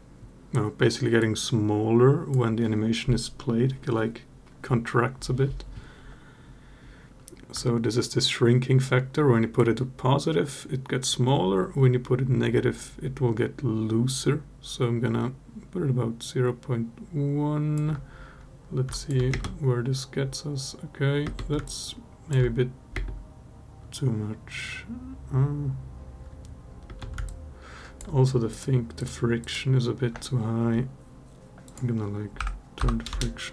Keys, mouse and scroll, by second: 9.3-17.6 shift+drag, 18.7 alt+click, 19.1 space, 21.0 space, 21.4-22.1 alt+drag, 22.7 space, 26.8 space, 27.0-27.7 alt+drag, 31.4-32.9 drag, 33.4 space.